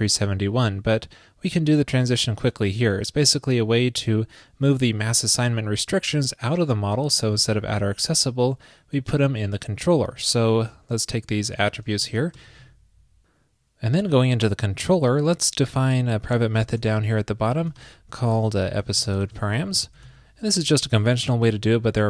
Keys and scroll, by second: 11.6 super+x, 12.1 shift+super+Right, 12.6 super+s, 15.7 super+Down, 20.1 super+j.